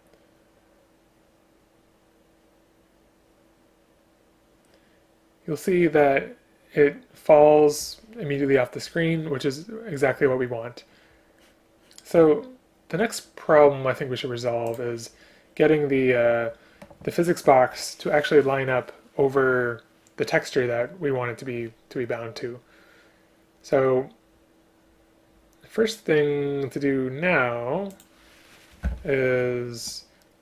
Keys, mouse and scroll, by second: 28.9 Return.